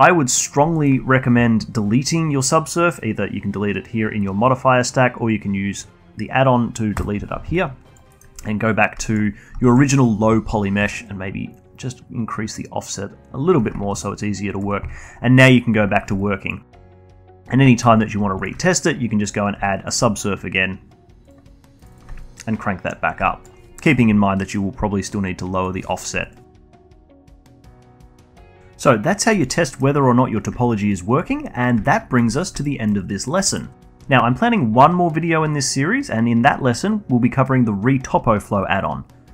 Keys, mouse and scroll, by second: 0.4-0.7 scroll down 1, 0.7-3.8 alt+middle drag, 7.3-8.5 drag, 8.5 alt+middle click, 9.4-17.3 alt+drag, 17.3-18.3 alt+middle drag, 18.3-18.8 alt+drag, 18.8-20.1 shift+right drag, 20.1-21.7 alt+drag, 22.2-23.3 drag, 23.6 alt+click, 24.2-24.7 scroll down 2, 24.7-28.6 shift+drag, 29.7 middle click, 30.3-30.6 scroll down 1, 30.6-32.3 alt+drag, 32.3 scroll down 1, 32.6-33.0 alt+middle drag, 33.0-33.4 alt+drag, 33.4-36.5 alt+middle drag.